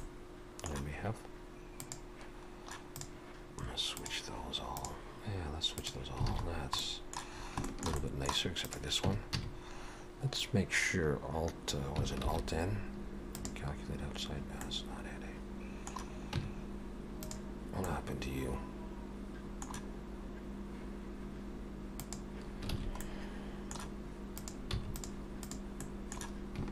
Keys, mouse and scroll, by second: 1.8 click, 2.9 click, 3.9 click, 4.8 click, 5.8 click, 6.3 alt+a, 6.5-6.8 scroll down 3, 6.8 middle click, 7.4 scroll up 3, 7.7 shift+middle click, 8.0 middle click, 8.6 click, 9.1 Tab, 9.4 a, 12.3 alt+n, 14.6 middle click, 16.4 Tab, 17.1 click, 17.9 middle click, 22.0 click, 22.8 alt+a, 23.0 middle click, 24.4 click, 24.7 x, 25.5 click, 25.8 middle click.